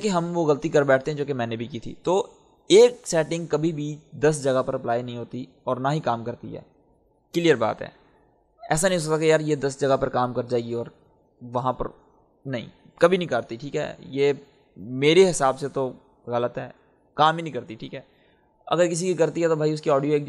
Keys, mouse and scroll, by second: 11.5-14.4 drag, 18.5-20.2 drag.